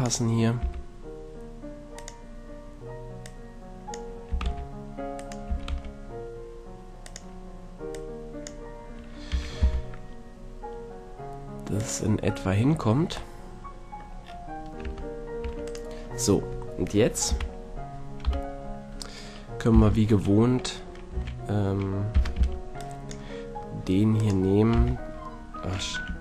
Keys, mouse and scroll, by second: 0.6 s, 3.2-4.9 drag, 4.3 s, 5.3-9.7 drag, 5.5 s, 9.3 s, 11.9-13.3 drag, 13.3-14.8 middle drag, 14.8 Tab, 15.4 Tab, 17.3 KP_3, 18.3 KP_1, 19.7 z, 21.1 a, 22.1 z, 22.4 b, 24.2-25.3 drag, 24.8 h.